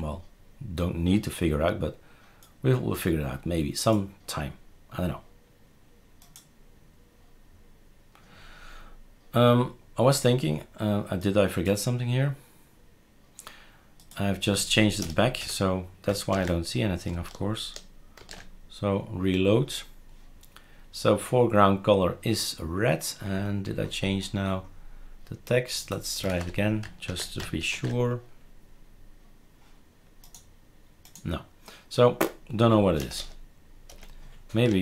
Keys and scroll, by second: 15.0 BackSpace, 15.4 6, 16.3 ctrl+s, 18.2 shift+super+r, 25.9-26.8 typing, 27.1 ctrl+s, 27.7 shift+super+r, 33.0 BackSpace, 33.1 BackSpace, 33.9 BackSpace.